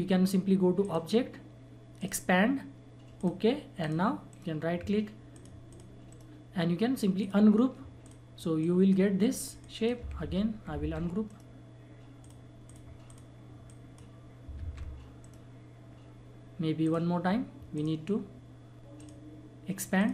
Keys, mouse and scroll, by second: 4.3 right click, 5.3 click, 6.1 right click, 7.2 click, 10.2 ctrl+z, 10.9 ctrl+z, 11.3 right click, 12.2 click, 14.5 click, 14.6 ctrl+z, 15.2 right click, 16.8 click.